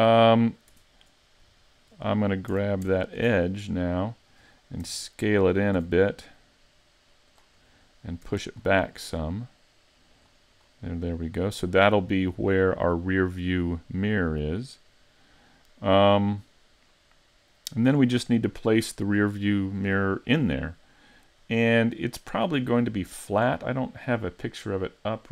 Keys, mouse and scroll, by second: 0.8 Tab, 1.2-1.6 scroll up 1, 1.6 shift+middle click, 3.0 alt+right click, 3.5 middle click, 4.9 e, 5.8 s, 7.4 click, 7.7 middle click, 8.3 e, 8.6 click, 10.2 click, 10.5 click, 11.1 middle click, 22.0 middle click, 24.3-25.2 scroll down 1, 25.2 scroll down 1.